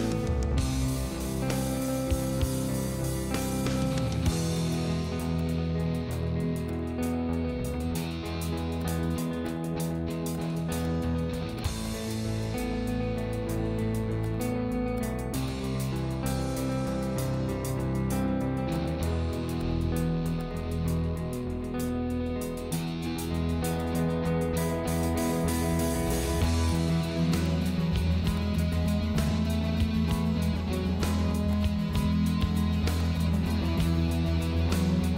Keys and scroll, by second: 7.9 ctrl+z, 18.0 ctrl+z, 21.3 ctrl+z, 23.4 ctrl+z.